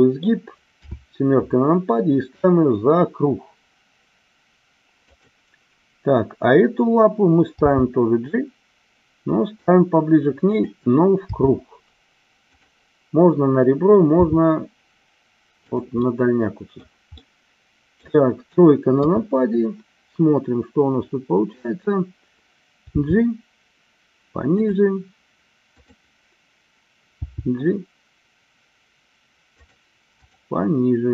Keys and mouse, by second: 0.7 KP_7, 5.0 click, 7.7 g, 10.4 click, 11.3 r, 14.1 g, 16.1-16.8 middle drag, 17.3-18.0 middle drag, 18.9 KP_3, 22.9 g, 24.5 click, 25.6 click, 27.1 g, 29.6 click, 30.1 click.